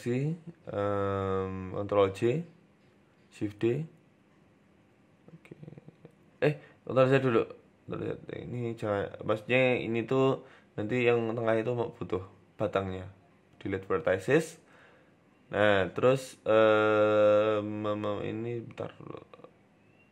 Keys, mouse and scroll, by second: 1.2 ctrl+j, 1.6-2.4 scroll down 2, 2.0 shift+middle click, 3.0 g, 5.3 shift+d, 6.0 ctrl+z, 6.4 ctrl+z, 6.9 shift+d, 7.7 Tab, 8.0-8.4 scroll up 2, 8.2 shift+middle click, 9.0 Tab, 9.2 right click, 10.2-11.9 typing, 12.5 Delete, 13.4 scroll up 1, 13.6 shift+middle click, 14.2 scroll down 2, 14.5 shift+middle click, 14.8 scroll up 4, 15.2 shift+middle click, 15.3 Tab, 15.7 right click, 15.8-16.8 scroll down 4, 15.9 Tab, 16.8 ctrl+r, 17.9 s.